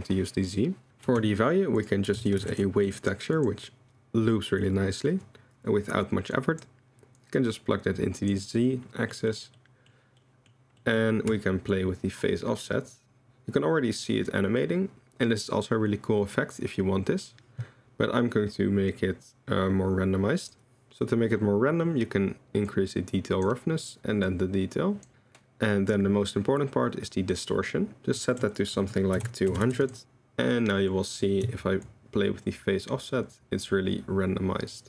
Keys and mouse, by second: 1.0 shift+a, 6.3 click, 7.2-8.3 drag, 9.1 drag, 9.5-9.9 drag, 10.3 click, 10.8 click, 11.7-20.5 shift+drag, 22.8 click, 24.3 click, 27.1-28.1 drag, 28.4-29.8 drag, 29.6 0, 30.0-30.9 drag, 31.8-34.8 shift+drag.